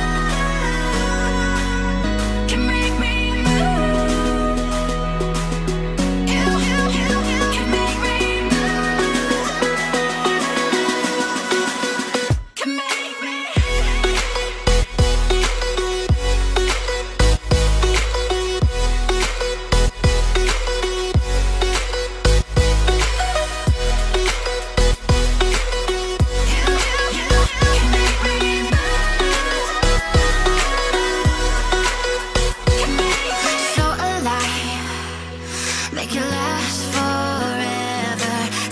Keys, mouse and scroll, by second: 1.7-2.6 typing, 3.9 8, 4.0 Return, 6.8 double click, 18.4-19.3 typing, 19.4 Return, 23.2-24.5 typing, 24.5 Return, 28.2-28.5 scroll down 2, 28.5 shift+middle click, 31.7 ctrl+click, 32.3 ctrl+click.